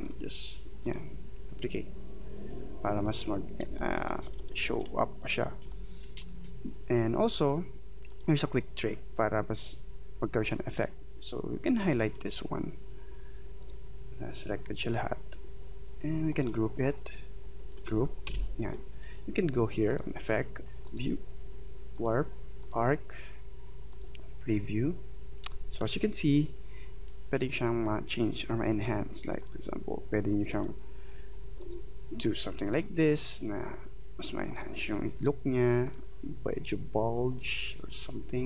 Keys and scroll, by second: 3.7 space, 18.3 ctrl+g.